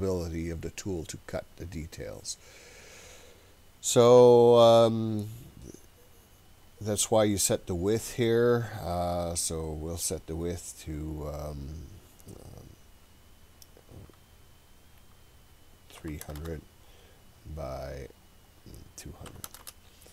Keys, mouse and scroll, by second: 6.5-17.7 drag, 16.4 KP_0, 18.1-20.1 drag, 19.6 KP_0.